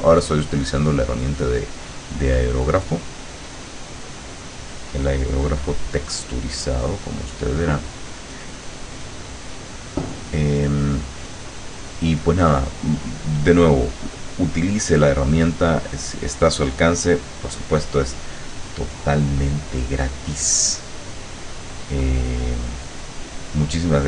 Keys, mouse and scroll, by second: 0.6 click, 1.1 click, 2.3 click, 4.5-7.4 drag, 8.5 click, 9.7 click, 10.5 click, 11.5 click, 11.7-14.2 drag, 16.3 click, 19.0 click, 21.2 click, 22.1-24.0 drag.